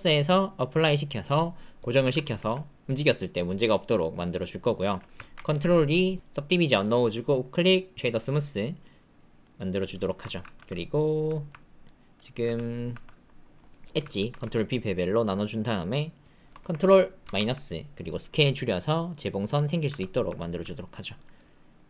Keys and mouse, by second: 2.3 g, 5.3 ctrl+2, 7.3 click, 9.4 click, 10.0 shift+middle click, 10.2 ctrl+click, 10.5 Tab, 10.7 click, 11.2 ctrl+click, 11.8 click, 12.4 Tab, 12.9 Tab, 14.2 ctrl+b, 17.2 ctrl+KP_Subtract, 18.2 s, 19.8 Tab, 20.5 ctrl+click, 20.7 click.